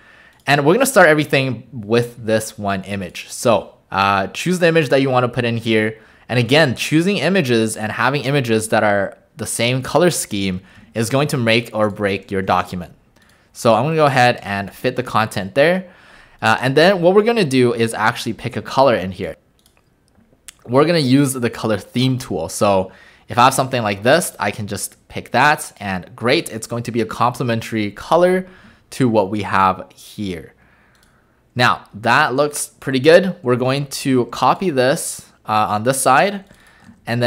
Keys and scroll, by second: 31.6 w, 33.4 w, 36.9 ctrl+alt+a.